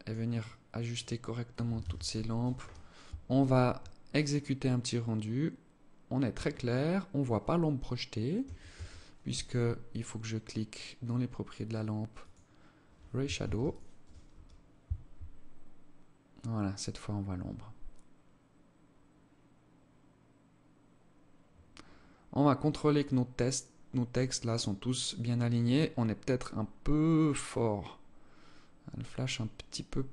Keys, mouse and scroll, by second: 0.5 alt+click, 1.1 ctrl+s, 8.1 Escape, 11.6 click, 12.7 ctrl+s.